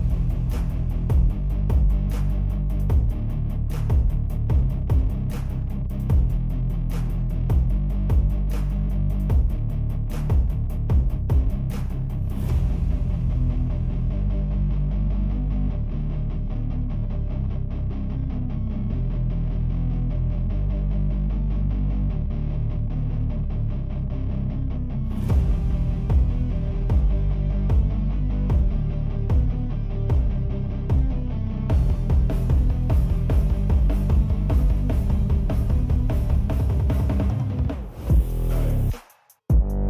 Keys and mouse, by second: 0.9 click, 1.1 drag, 1.9-2.4 drag, 2.8 alt+drag, 3.0-3.7 alt+right drag, 6.0 click, 7.8 click, 8.2 click, 8.7 click, 9.4 click, 10.4-10.9 drag, 11.7-12.5 alt+drag, 14.1-14.7 drag, 14.7 middle click, 18.4 ctrl+middle click, 19.2-20.3 drag, 21.6 ctrl+z, 21.9 click, 24.0-24.3 ctrl+middle drag, 24.7-26.7 alt+middle drag, 27.9 click, 28.4 click, 28.9 click, 29.4 click, 29.8 click, 30.2 click, 30.5 click, 30.9 click, 33.6 ctrl+Tab, 34.0 shift+drag, 34.3 ctrl+p, 34.8 click, 35.2 click, 35.7 ctrl+Tab, 35.8 drag, 36.6 ctrl+Tab, 36.9 shift+drag, 37.2 ctrl+p, 37.6 click, 37.8 r, 38.4 click, 38.7 ctrl+Tab, 38.8 click, 39.0-39.5 ctrl+drag.